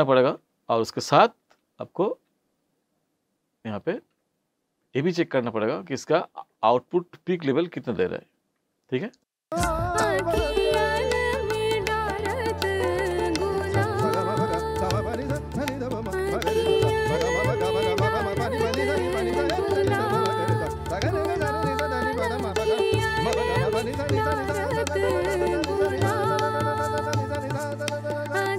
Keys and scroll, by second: 9.4 space.